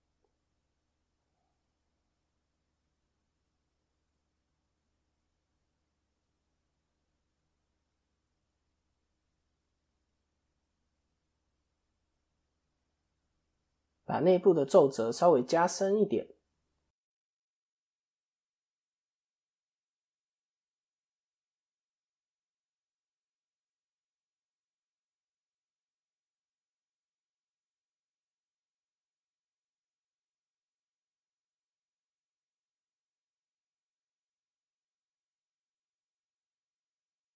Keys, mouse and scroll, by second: 0.9 2, 1.4 middle click, 3.2 click, 3.8 scroll up 1, 3.9 click, 4.6 shift+middle click, 5.2-5.8 scroll down 2, 5.6 click, 6.0 shift+middle click, 6.3-6.8 scroll up 5, 6.6 middle click, 7.0 scroll down 1, 7.6 middle click, 9.1 click, 11.5 shift+click, 12.2 shift+click, 13.0 middle click, 14.1 shift+click, 14.6-15.2 scroll down 5, 14.8 middle click, 15.5-16.0 scroll down 1, 17.0 click, 20.4-20.7 scroll up 3, 20.7 shift+middle click, 21.2 middle click, 23.0 click, 26.9 click, 30.1 click, 30.7 KP_3, 31.9 KP_1, 32.5 ctrl+KP_3, 34.0-34.9 scroll down 1, 34.9 scroll down 1, 35.1 KP_7, 37.0 scroll up 1.